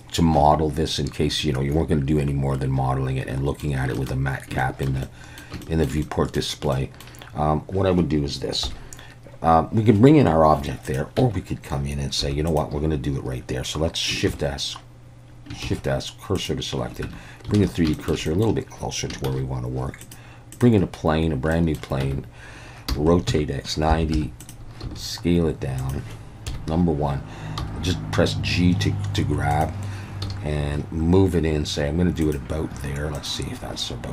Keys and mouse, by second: 1.4-3.6 middle drag, 4.0 shift+middle click, 4.6 shift+middle drag, 5.0-5.4 middle drag, 5.6 shift+middle drag, 6.0 middle click, 6.7 middle click, 8.7 KP_1, 10.9 click, 11.2 Tab, 12.2 3, 14.4 shift+s, 15.7 shift+s, 17.1 Tab, 17.6 alt+a, 18.0 shift+middle click, 18.3 middle click, 19.3 shift+a, 21.6 middle click, 22.0 Tab, 22.9-24.8 typing, 24.4 click, 25.8 click, 26.5 KP_1, 27.6 g, 30.2 s, 32.2 click.